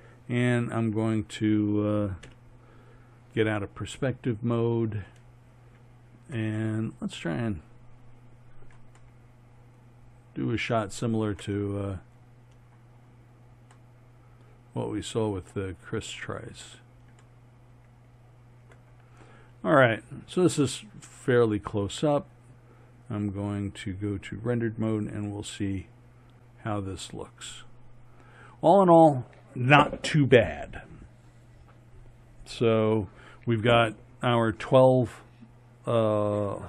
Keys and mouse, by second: 0.4 middle click, 2.3 KP_5, 3.6 middle click, 6.6-7.2 middle drag, 8.0 middle click, 9.2 middle drag, 9.4-10.1 middle drag, 10.2 middle click, 13.0 middle click, 13.2-14.2 middle drag, 14.3-14.7 middle drag, 14.8 middle click, 15.0 middle click, 15.8-17.7 middle drag, 24.3 drag, 25.3 click.